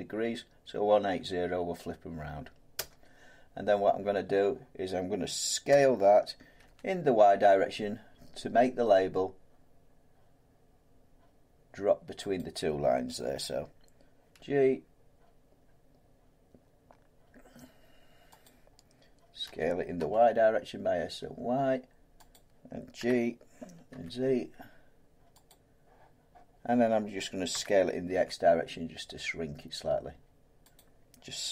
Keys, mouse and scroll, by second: 2.7 Return, 5.7-6.6 typing, 9.5 typing, 12.4-14.9 drag, 14.3 g, 18.4 click, 19.5 s, 20.0 y, 22.3 click, 23.0 g, 23.9 g, 25.5 click, 27.5 s, 28.1 s, 30.7 click.